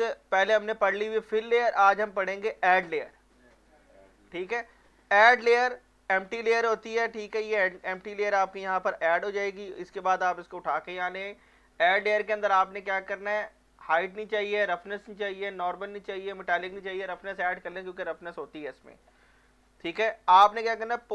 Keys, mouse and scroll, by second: 5.7-9.7 drag, 7.7-8.9 drag, 11.2 scroll down 2, 12.2-12.6 scroll down 1, 13.9 click, 18.2 alt+click, 18.5 alt+right click, 18.8 alt+click, 19.2-21.0 alt+middle drag, 21.0-21.1 drag.